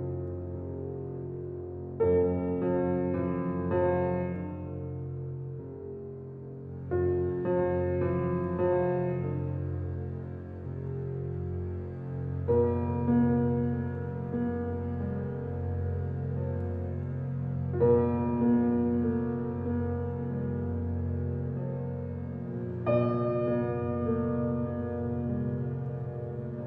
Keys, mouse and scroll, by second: 15.0-20.8 drag, 22.5-24.4 ctrl+alt+scroll up 2.